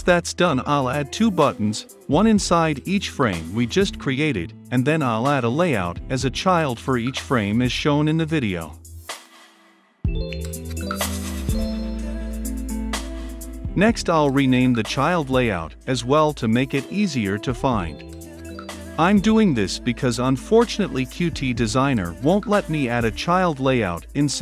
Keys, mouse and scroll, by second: 5.7-9.0 drag, 13.8-15.2 middle drag, 15.7-18.1 typing, 18.4 Return, 19.8-21.1 drag, 21.1-23.3 typing, 23.6 Return.